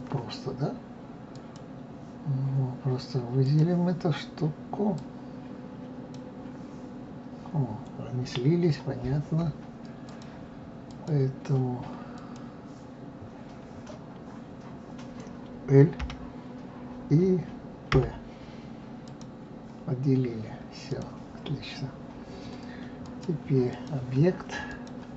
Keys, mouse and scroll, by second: 1.3 click, 3.4 click, 5.0-8.0 drag, 8.4-9.1 scroll up 2, 10.1-12.3 drag, 20.1-20.8 scroll down 1, 20.9 click, 23.0-24.9 drag.